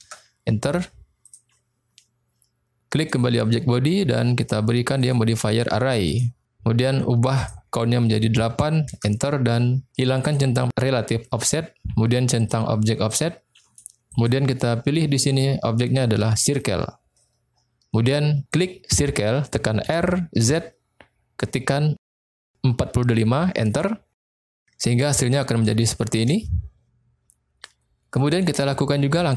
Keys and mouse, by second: 1.2 click, 3.0 click, 5.0-6.2 drag, 7.3-9.2 drag, 10.2 click, 12.4 click, 13.1 click, 14.3-16.5 drag, 18.5 click, 19.9 r, 20.4 z, 22.1 4, 22.3 5, 23.7 Return, 24.8-25.4 middle drag, 25.8-26.1 shift+middle drag, 26.4-27.5 middle drag.